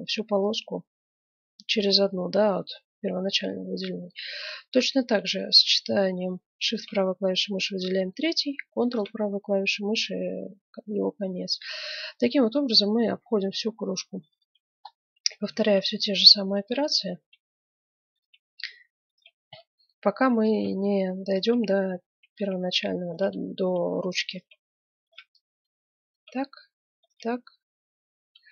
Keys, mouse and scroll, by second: 3.5-6.4 middle drag, 6.7-8.4 right drag, 8.8-10.6 right drag, 11.2-12.5 middle drag, 13.2-14.8 right drag, 14.8 middle click, 15.2 click, 15.2 right click, 16.4 right click, 19.0 right click, 21.3 click, 22.9 click, 23.3 right click, 23.4 click, 23.5 right click, 25.1 right click, 26.9 right click.